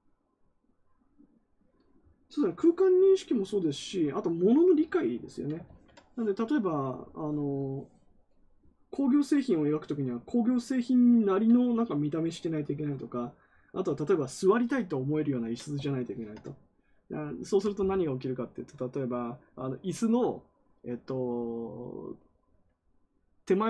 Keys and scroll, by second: 5.6 ctrl+z.